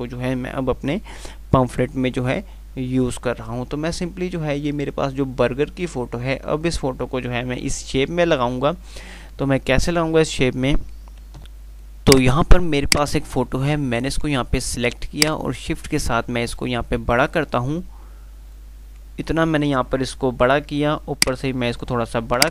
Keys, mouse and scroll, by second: 11.6 click, 15.4-18.8 shift+click, 21.4-22.3 click.